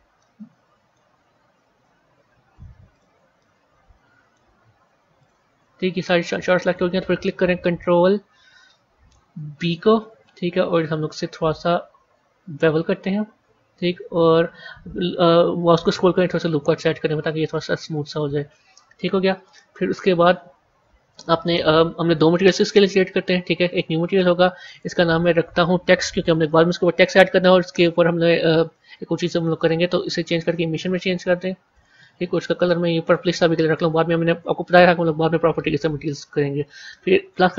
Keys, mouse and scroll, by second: 0.1-2.8 middle drag, 2.8 shift+click, 3.3-5.1 middle drag, 5.1 shift+click, 5.7-8.7 middle drag, 9.6 ctrl+b, 23.5-24.5 drag, 24.6-27.6 drag, 30.3-32.6 drag, 37.2-37.5 drag.